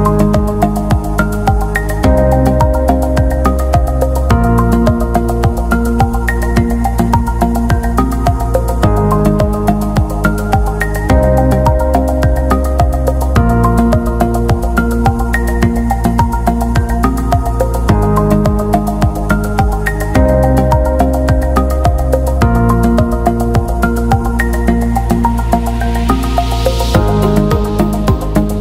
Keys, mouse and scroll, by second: 7.6-8.1 scroll up 1, 8.6 scroll up 1, 10.5 click, 11.2-11.6 scroll down 1, 12.2 click, 15.7 c, 16.4 Tab, 17.6 t, 17.9 click, 18.7 v, 20.0 click, 25.6 click.